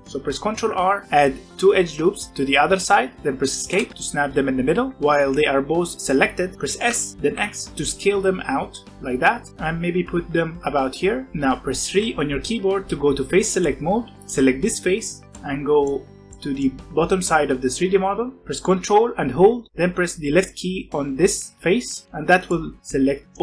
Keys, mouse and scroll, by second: 0.4 ctrl+r, 4.9-6.8 middle drag, 6.8 s, 11.3-13.3 middle drag, 14.1 click, 15.0-16.0 middle drag, 16.0 scroll up 1, 16.2-18.6 middle drag, 21.8 ctrl+click, 22.4-23.4 middle drag.